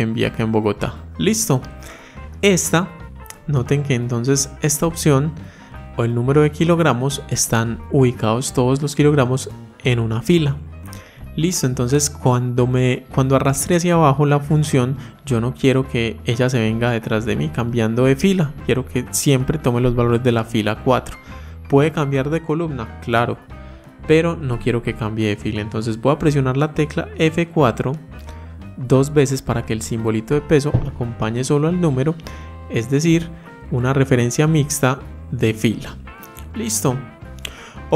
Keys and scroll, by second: 26.8 F4.